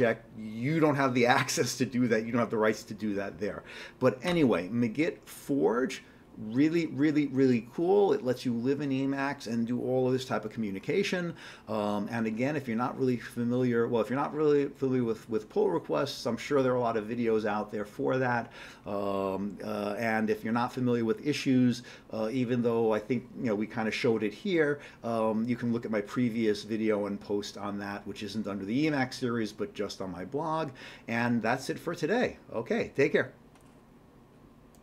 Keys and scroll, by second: 4.3 q.